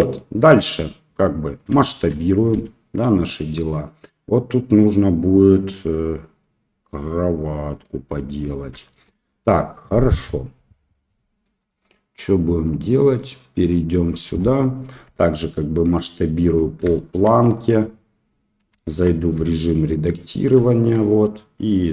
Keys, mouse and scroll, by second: 2.0 shift+middle click, 2.5 s, 11.6 click, 12.7-14.3 drag, 15.5 s, 17.1 shift+middle click, 18.9 shift+middle click, 19.4 Tab, 20.6 shift+middle click.